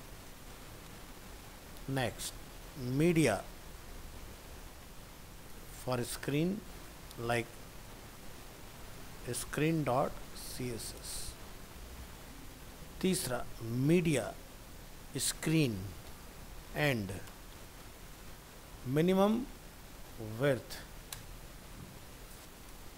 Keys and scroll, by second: 0.6 ctrl+c, 1.0 ctrl+Return, 1.1 ctrl+v, 4.2 ctrl+shift+Left, 8.0 ctrl+shift+Left, 10.6 ctrl+c, 11.3 ctrl+v.